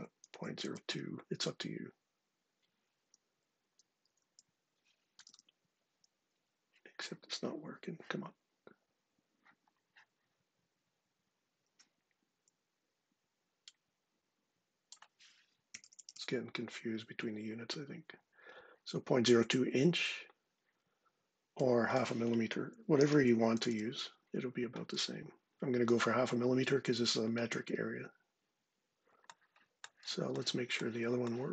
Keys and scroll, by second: 0.0-0.8 typing, 3.3 Left, 3.9 Right, 4.6-5.4 typing, 15.2-16.3 typing, 22.4-23.8 typing.